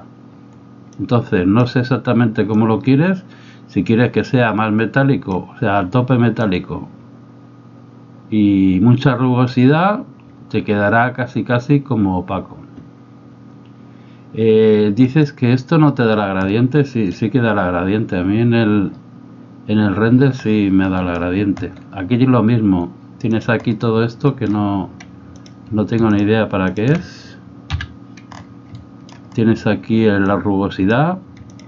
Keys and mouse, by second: 1.0 click, 2.7-5.4 drag, 6.5-9.5 drag, 15.1 right click, 16.5 middle click, 21.1 middle click, 24.4 middle click, 25.4 click, 26.1 shift+click, 26.7 shift+click, 27.7 x, 28.8 shift+middle click, 30.3 click, 31.5 shift+click.